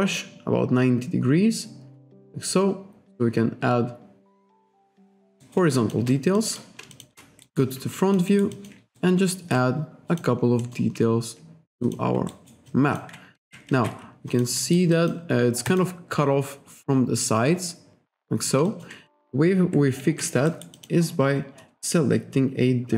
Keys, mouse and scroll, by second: 5.5 alt+right click, 5.8 alt+shift+click, 6.4 alt+click, 7.0 alt+shift+click, 7.5 alt+right click, 8.0 alt+click, 8.3 alt+right click, 9.0 ctrl+right click, 10.2 click, 10.7 alt+middle click, 11.9 click, 12.4 alt+right click, 12.7 alt+click, 13.5 ctrl+z, 13.8 ctrl+z, 14.3 alt+click, 14.7 alt+right click, 15.0 alt+click, 15.7 click, 18.7 alt+click, 20.2 ctrl+z, 20.5 alt+right click, 20.8 alt+click, 21.3-21.8 scroll down 1, 21.9-22.3 scroll down 1.